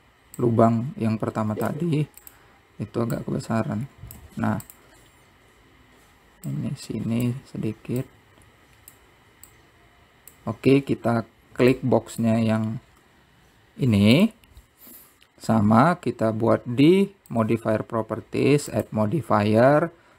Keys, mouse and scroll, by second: 0.1-1.6 middle drag, 1.6 click, 4.4 click, 7.8 click, 9.3 click, 10.8 click, 12.9-13.9 drag, 13.9 scroll up 2, 15.4 click, 18.6 click, 19.9 click.